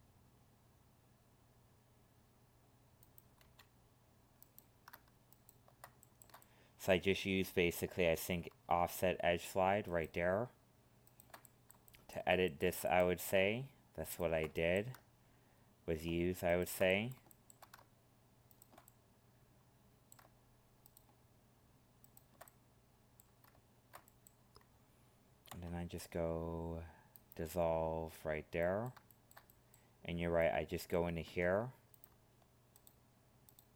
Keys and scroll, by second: 31.2 ctrl+Tab.